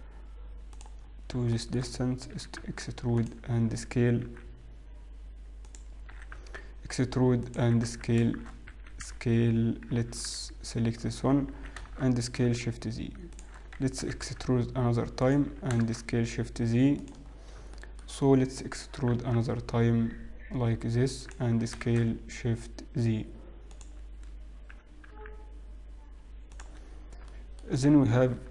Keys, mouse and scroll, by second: 1.8 shift+middle click, 1.8 scroll up 3, 3.7 e, 4.8 s, 6.2 e, 7.8 s, 9.2 a, 10.2 ctrl+z, 11.6 s, 14.4 e, 16.4 s, 18.4 shift+middle click, 18.4-19.2 scroll down 3, 19.2 e, 23.2 s, 24.9 g.